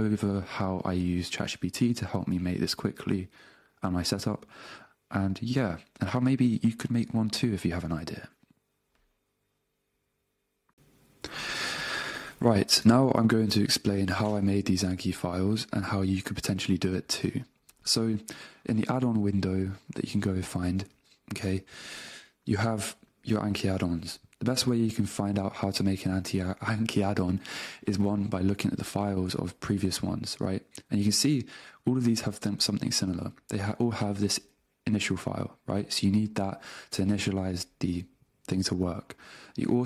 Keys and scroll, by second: 15.2 super+Tab, 32.2 Down, 34.0 Up.